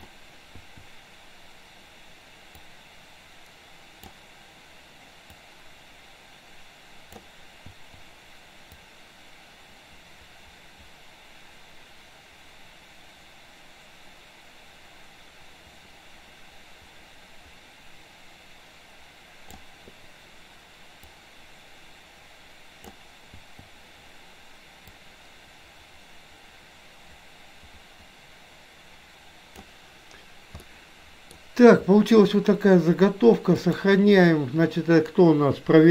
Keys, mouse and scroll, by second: 2.8-4.4 drag, 5.9-7.3 drag, 8.9-19.8 drag, 21.0 click, 21.7-23.0 drag, 25.0-29.8 drag, 30.7-31.5 middle drag, 33.5-35.9 drag.